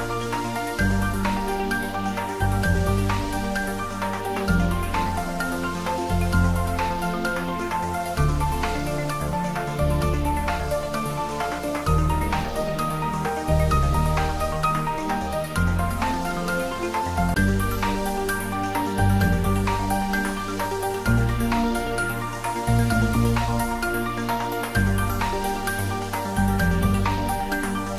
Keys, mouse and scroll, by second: 0.0-0.6 typing, 2.6 click, 3.1 `, 3.9 3, 6.3 g, 8.4 y, 11.8 x, 12.3 click, 12.9 s, 13.6 x, 15.7-18.7 drag, 18.7 g, 19.1 y, 20.1 x, 22.4 click, 24.1 scroll down 1, 24.5-26.6 middle drag, 26.6-27.0 scroll down 1, 27.0-27.9 middle drag.